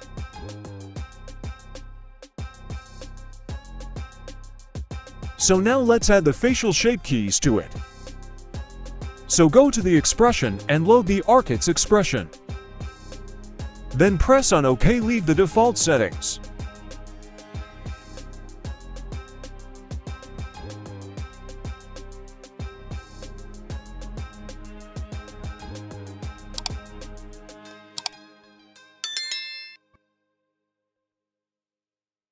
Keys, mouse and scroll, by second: 0.5 alt+g, 0.7 alt+r, 1.0-1.6 scroll down 2, 1.4 middle click, 2.9-3.3 middle drag, 3.4 scroll up 1, 3.8 middle click, 5.1 middle click, 5.9 click, 9.5-15.0 drag, 16.9 middle click, 18.3 click, 20.8-21.1 middle drag, 20.8 click, 21.2-22.1 scroll up 1, 22.1 right click, 22.1 scroll up 1.